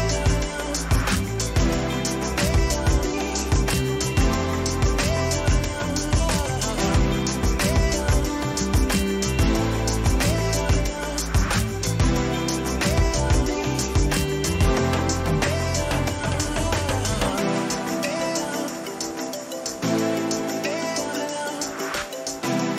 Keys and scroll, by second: 6.0 ctrl++, 8.5 ctrl+-.